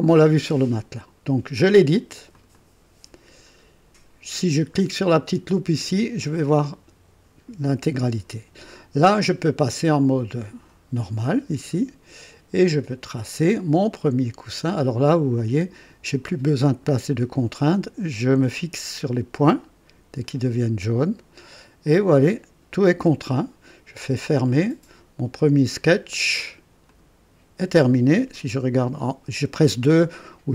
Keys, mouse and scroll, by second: 2.3 click, 3.5-5.1 scroll down 2, 5.7 click, 11.3 click, 13.2 click, 15.3 click, 20.2 click, 24.3 click, 26.8 click.